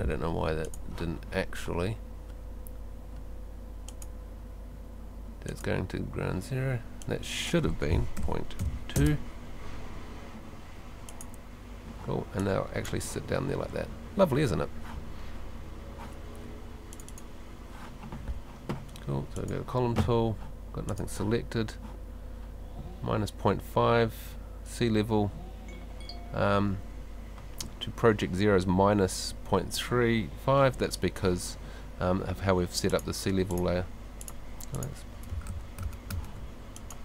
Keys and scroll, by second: 8.2 space, 14.3 Escape.